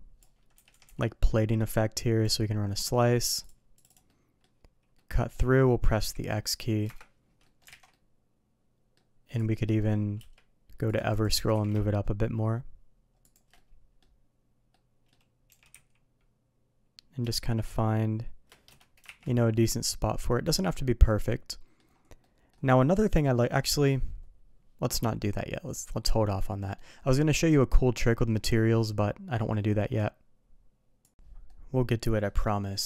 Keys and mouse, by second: 0.8 Escape, 1.0-2.2 drag, 4.1-7.2 middle drag, 7.4 middle drag, 7.7 alt+a, 7.9-8.9 middle drag, 9.5 middle click, 10.2 q, 11.3 g, 13.5-14.0 middle drag, 14.7-15.1 middle drag, 15.5 g, 19.0 shift+2, 19.5-21.8 middle drag, 22.2 middle drag, 23.1-23.5 middle drag, 26.7 middle click, 31.4-32.2 middle drag, 32.7 middle drag.